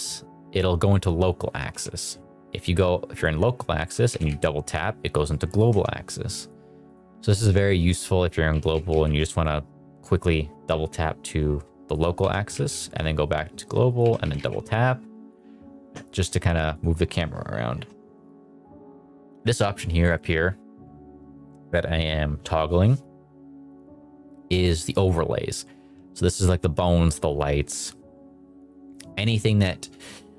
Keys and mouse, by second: 1.7 Escape, 2.4 click, 3.7 s, 4.1 z, 4.2 z, 5.7 Escape, 6.4 click, 6.9 click, 8.5 s, 8.9 z, 12.2 g, 12.5 z, 13.9 click, 14.0 g, 14.2 z, 14.3 z, 15.3 click, 16.7 click, 18.6 click, 24.5 click, 24.9 click.